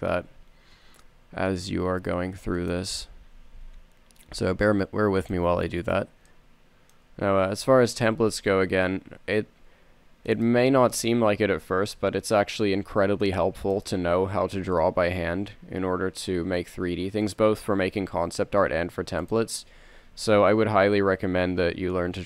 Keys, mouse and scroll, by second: 1.2 s, 3.7 g, 6.0 a, 6.9 middle click, 8.6 z, 8.9 c, 11.2 z, 12.5 e, 15.1 g, 18.3 s, 20.3 g.